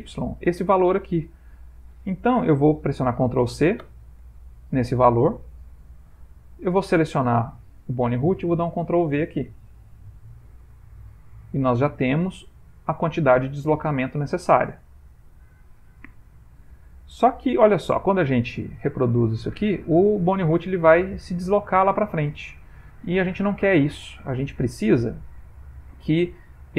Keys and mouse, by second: 3.8 ctrl+c, 7.0 click, 10.0 ctrl+v, 11.8 ctrl+middle click, 12.6 middle click, 14.1 shift+middle click, 16.5 click.